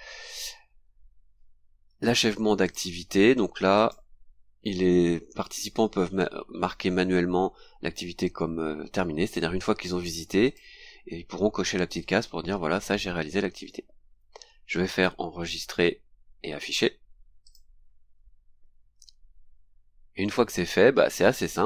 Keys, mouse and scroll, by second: 0.3 click, 2.6 click, 3.7 click, 9.2 click, 10.4 click, 17.4 click, 21.3-21.6 scroll down 2.